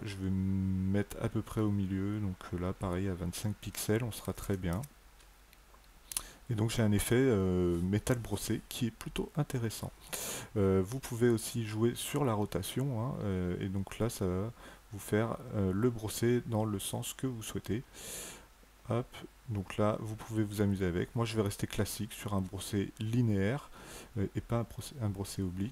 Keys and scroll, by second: 4.1 KP_2, 4.4 KP_5, 4.5 Tab.